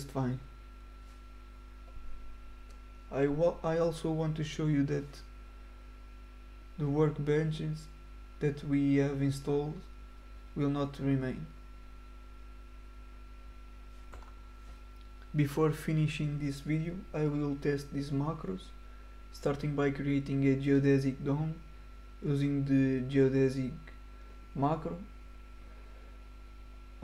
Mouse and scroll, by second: 1.2 click, 2.0 click, 3.4 middle click, 6.4-6.7 scroll up 2, 8.1-8.4 scroll down 1, 10.1-10.7 scroll up 1, 11.2 middle click, 12.8 click, 14.6 click, 16.4 click, 17.6 right click, 18.2 click, 19.0 middle click, 19.4 right click, 20.8 drag, 26.0 click.